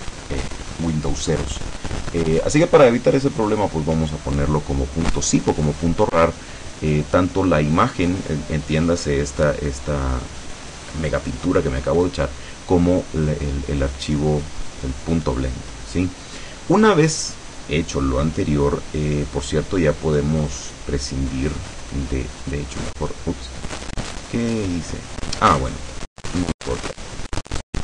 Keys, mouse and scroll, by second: 20.8-22.9 drag, 27.0 click.